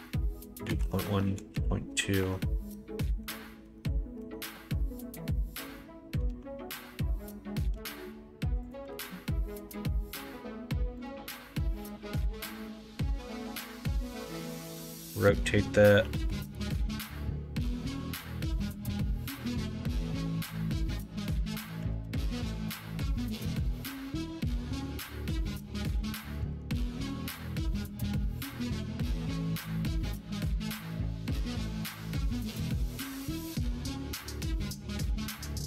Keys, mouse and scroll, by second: 3.4 Tab, 7.7 e, 8.9 ctrl+z, 9.6 s, 11.3 s, 13.2 g, 14.6 r, 18.6 s, 21.9 ctrl+z, 22.5 s, 23.8 middle click, 24.9 s, 26.3 g, 27.6 ctrl+z, 28.1 g, 29.7 middle click, 30.4 middle click, 31.4 shift+middle click, 32.0 g, 35.2 g.